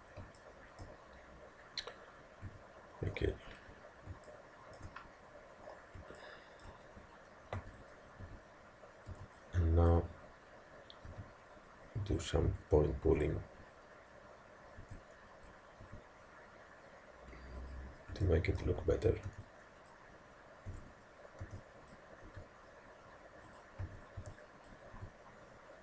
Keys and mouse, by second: 0.4-2.5 middle drag, 2.5 a, 3.5-6.5 middle drag, 3.5 z, 6.6 middle click, 7.2 middle click, 7.6 a, 8.3 a, 9.1 b, 11.1 g, 13.1 a, 14.8 b, 15.9 g, 18.8 a, 19.3 b, 20.7 a, 21.5 b, 22.3 g, 23.9 a, 24.2 b, 25.0 g.